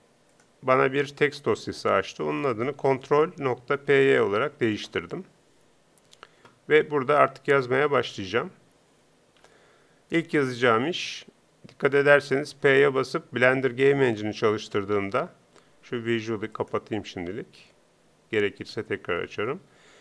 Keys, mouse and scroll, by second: 9.4 t, 15.4 p.